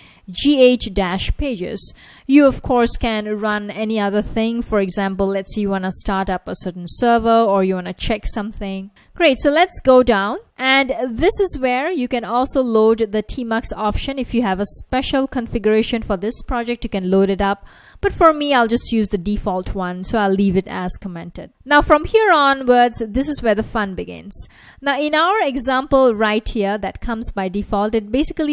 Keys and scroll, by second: 0.2-1.6 typing, 1.6 super+s, 12.4 F1, 14.5 F1, 14.8 F1, 15.9 F1, 17.0 F1, 21.6 F1, 23.8 F1.